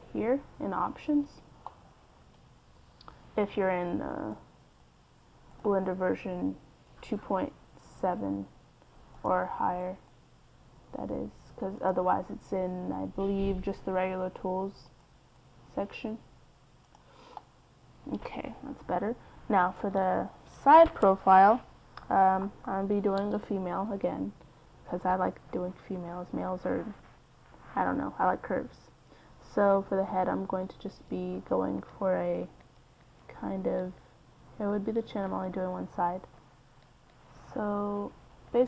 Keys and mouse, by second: 0.8 middle click, 1.4-2.5 middle drag, 2.5 KP_3, 4.1-5.6 right drag, 6.5-8.2 right drag, 9.3-10.9 right drag, 14.9-16.2 right drag, 17.1 middle click, 18.1 KP_1, 29.1-38.6 typing, 31.0 click, 34.2 click.